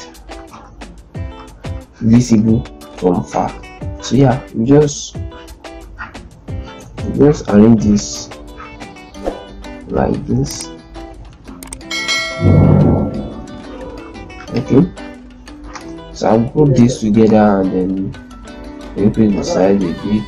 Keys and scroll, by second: 0.3 ctrl+space, 3.7 shift+Right, 5.9 shift+Right, 6.1 shift+Right, 6.4 shift+Right, 6.6 shift+Right, 6.7 shift+Right, 6.9 shift+Right, 9.0 shift+Right, 9.7 shift+Right, 10.1 shift+Up, 10.7 shift+Right, 11.5 shift+Up, 11.7 shift+Right, 12.7 shift+Right, 13.1 shift+Up, 14.0 z, 15.5 ctrl+space.